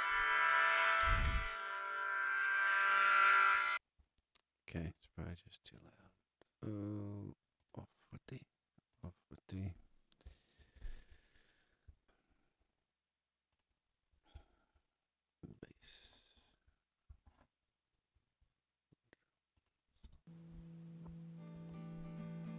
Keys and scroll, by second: 3.5 space, 10.5 super+=, 20.0 space, 21.0 super+space.